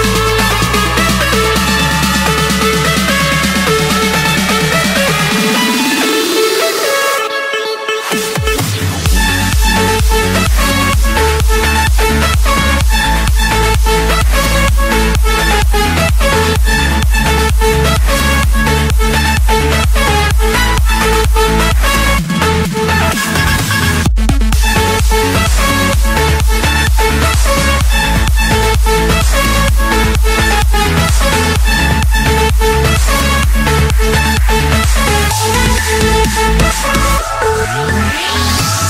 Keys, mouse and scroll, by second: 1.1-3.7 typing, 2.3 Return, 4.2 Escape, 5.8 click, 7.3 click, 7.6-7.9 scroll, 8.1 Escape, 9.4 c, 12.4 click, 15.6 d, 15.9 Return, 17.3 typing, 18.2 Return, 18.9 Escape, 21.5 click, 22.0 middle click, 22.6 click, 23.2 click, 25.8 click, 30.1-31.5 typing, 32.7 Return, 36.4-36.8 typing, 37.3 Return.